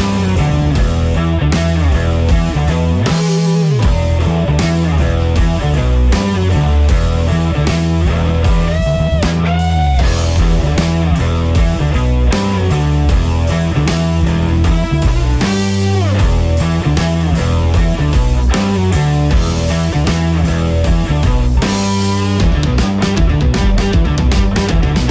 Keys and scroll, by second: 7.2 ctrl+r.